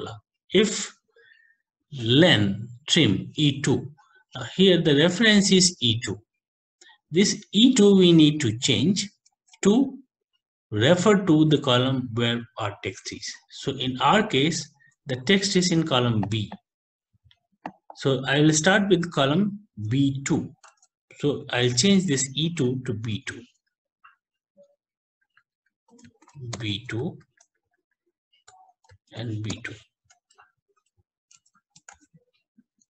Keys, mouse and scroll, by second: 5.4 click, 5.7 click, 9.3 alt+Tab, 16.5 click, 17.9 click, 20.7 alt+Tab, 21.7 Left, 22.6 Right, 23.1 shift+b, 23.7 ctrl+Right, 23.9 ctrl+Right, 24.2 ctrl+Right, 24.4 ctrl+Right, 24.6 ctrl+Right, 24.8 ctrl+Right, 25.0 ctrl+Right, 25.2 ctrl+Right, 25.6 ctrl+Right, 26.3 Right, 26.6 shift+b, 27.0 ctrl+Right, 27.2 ctrl+Right, 27.4 ctrl+Right, 27.6 ctrl+Right, 27.7 ctrl+Right, 27.9 ctrl+Right, 28.1 ctrl+Right, 28.5 ctrl+Left, 29.5 b, 30.1 Home, 30.5 End, 31.4 ctrl+c, 31.9 alt+Tab.